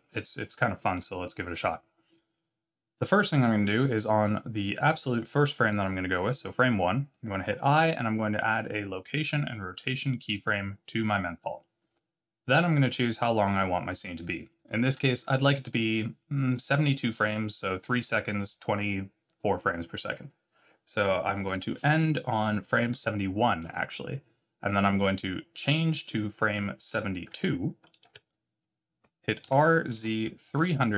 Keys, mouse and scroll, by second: 5.6 click, 7.4 i, 21.4 click, 26.0 click, 29.4 r.